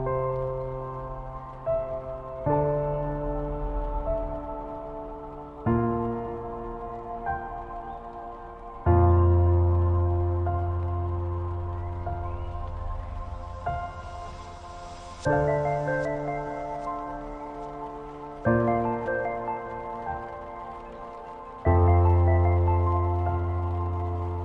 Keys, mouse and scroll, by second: 7.4-8.2 alt+scroll up 3, 9.9 click, 10.5 ctrl+t, 12.2-13.4 alt+shift+drag, 15.0 alt+scroll down 2, 16.3 space, 16.6 click, 16.8 space, 20.2 click.